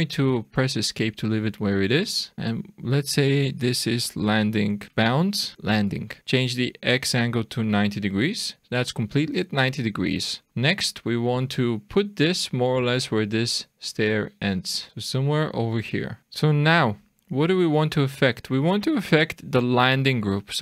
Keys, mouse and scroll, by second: 2.3 click, 6.2 click, 10.3 click, 10.5-11.4 scroll up 3, 11.4 click, 14.9 shift+middle click, 14.9-15.3 scroll down 2, 16.1 click, 16.2 click, 18.3 click.